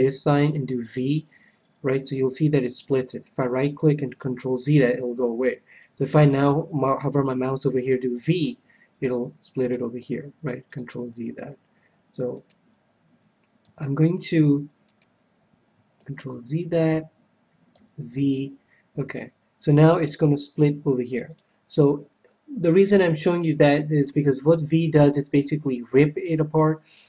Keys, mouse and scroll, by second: 0.7 v, 3.2-5.1 right drag, 4.2 ctrl+z, 5.2 ctrl+z, 8.1 v, 9.7-11.4 drag, 10.7 ctrl+z, 12.3-14.1 right drag, 13.6 v, 14.9-16.7 right drag, 16.1 ctrl+z, 16.9 ctrl+z, 17.7 v, 21.3-23.1 drag, 23.4 ctrl+z.